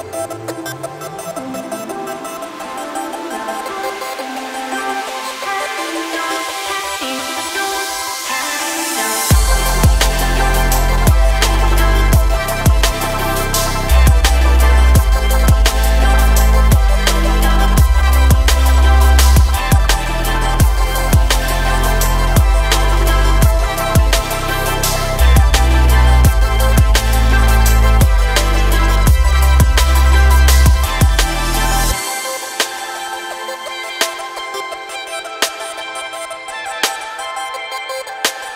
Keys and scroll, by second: 5.3 ctrl+z, 8.6 shift+e, 12.7 Tab, 16.9 Tab, 20.9 shift+e, 23.4 Tab.